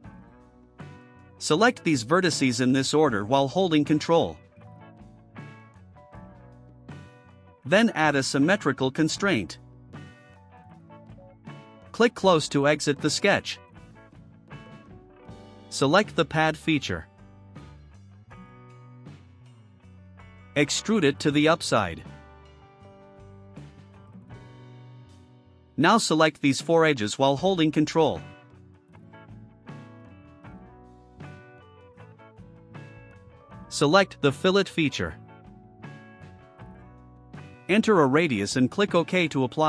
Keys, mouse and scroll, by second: 1.5 click, 3.8 ctrl+click, 6.3 ctrl+click, 10.4 click, 13.8 click, 15.6 right click, 19.1 click, 21.0 2, 21.6 0, 23.7 click, 26.9 click, 28.1 ctrl+click, 28.5 scroll down 2, 28.8-29.8 drag, 31.7 ctrl+click, 32.7 ctrl+click, 36.0 click, 38.2 0.